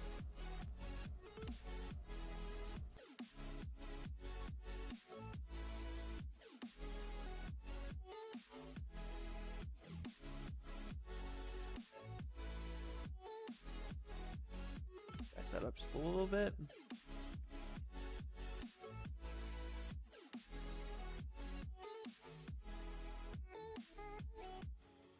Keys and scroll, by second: 4.7 s, 14.1 ctrl+z, 15.9 ctrl+z, 16.1 ctrl+z, 16.3 ctrl+z, 16.6 ctrl+z, 17.0 ctrl+z, 17.4 ctrl+z.